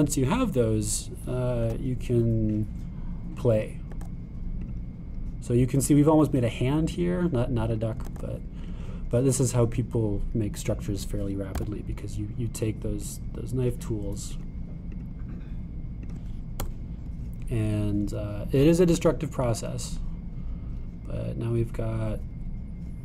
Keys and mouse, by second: 0.0 shift+click, 0.8 shift+click, 2.7 e, 5.0 e, 8.0 click, 9.1 e, 12.6 k, 20.0 click.